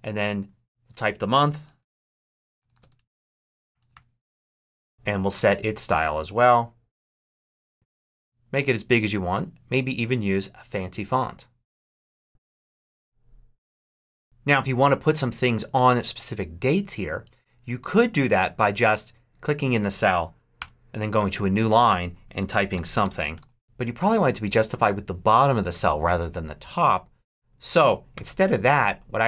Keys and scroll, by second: 1.3-4.3 typing, 4.4 super+a, 20.4 Return, 22.0-23.7 typing, 28.0 shift+BackSpace, 28.6 BackSpace.